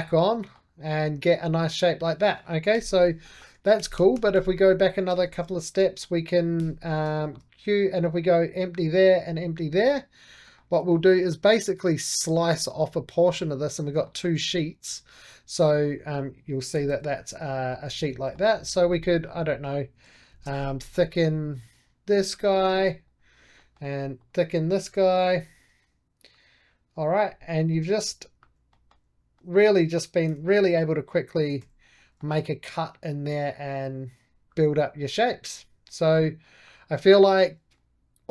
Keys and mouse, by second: 0.6 right click, 0.9-2.6 middle drag, 2.6 j, 2.8 click, 3.1 middle click, 3.4 ctrl+z, 4.0 ctrl+z, 5.1 ctrl+shift+z, 5.7 middle click, 6.5 q, 7.1-9.6 shift+drag, 9.6-10.8 middle drag, 10.9-12.7 middle drag, 12.7-13.9 drag, 13.9 middle click, 14.0 click, 14.8 3, 15.0 click, 15.5 4, 15.8 click, 16.6 g, 17.6 Escape, 18.1 middle click, 18.7 4, 18.9 click, 19.3 middle click, 20.2 shift+f, 21.2-22.9 drag, 22.9 right click, 23.5 middle click, 24.1 click, 24.9 shift+f, 25.7-28.0 drag, 28.0 right click, 28.6-30.2 middle drag, 30.2 4, 30.3 click, 30.5 q, 30.8 click, 31.5 q, 31.7 click, 31.9 right click, 32.1 middle click, 32.5 2, 33.1-34.6 drag, 34.6 2, 35.1-36.4 drag, 36.4 right click, 36.9-38.3 middle drag.